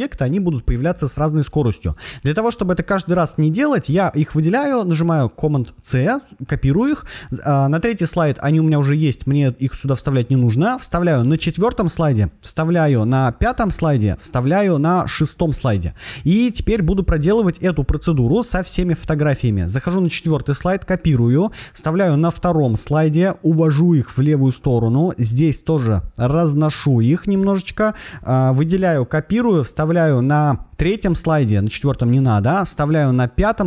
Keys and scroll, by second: 3.8 super+c, 10.9 super+v, 13.1 super+v, 15.2 super+v, 20.1 super+c, 21.8 super+v, 28.7 super+c, 30.4 super+v, 32.8 super+v.